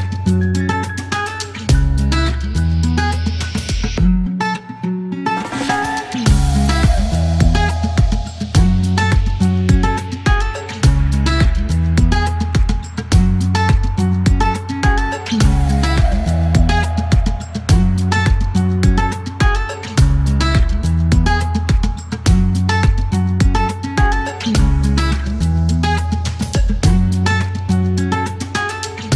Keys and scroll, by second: 0.0-0.7 typing, 1.4 alt+k, 3.3 space, 4.3 alt+e, 9.2 alt+t, 9.8 typing, 12.2 space, 12.7 KP_9, 13.6 t, 16.2 typing, 17.9-18.6 typing, 18.7 Return, 23.3 typing, 24.9 e, 26.6-29.1 typing.